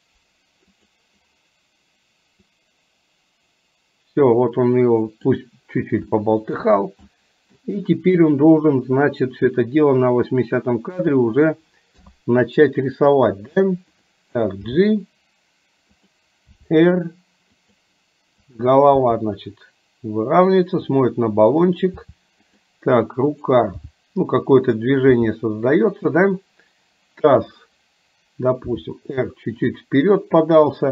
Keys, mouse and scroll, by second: 2.6-5.5 drag, 6.2-6.6 shift+middle drag, 7.1-7.7 middle drag, 8.7-11.2 drag, 12.1 KP_3, 14.1 click, 14.7 g, 16.7 r, 18.6 click, 19.0 r, 21.6 click, 23.8 g, 25.3 g, 28.8 r, 30.7 click.